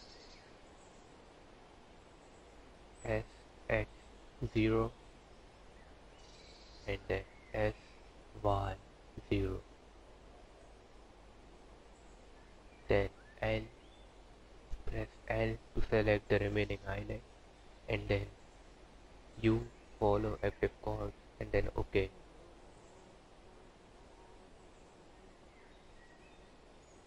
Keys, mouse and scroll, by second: 0.0-0.3 scroll down 6, 0.5 1, 1.2 3, 1.3 click, 1.6 1, 1.8 click, 2.7 s, 4.3 click, 5.0 s, 6.6 click, 7.9 s, 9.6 click, 10.3 s, 12.8 3, 13.5 click, 16.6 l, 16.9-18.2 scroll down 6, 18.2 scroll up 1, 19.1 u, 22.9 g, 26.2 click.